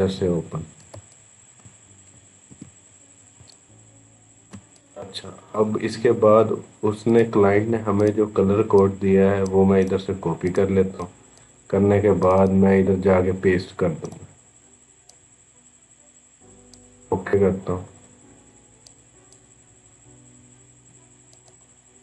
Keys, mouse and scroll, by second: 0.0 ctrl+=, 0.7 space, 1.2 space, 2.3 ctrl+=, 2.8-3.1 scroll up 1, 3.1 space, 3.3 click, 3.7 space, 4.6 click, 5.4-6.9 scroll down 1, 6.9 click, 9.6 right click, 10.3 click, 13.8 right click, 14.8 click, 14.9 click, 17.8-18.2 scroll up 1, 18.7 click.